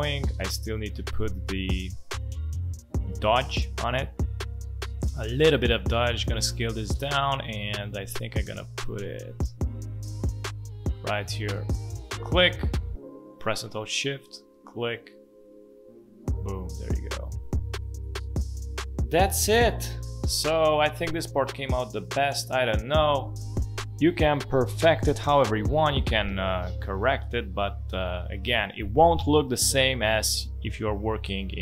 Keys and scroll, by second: 19.3 space, 24.8 v, 25.9 space, 27.7 space.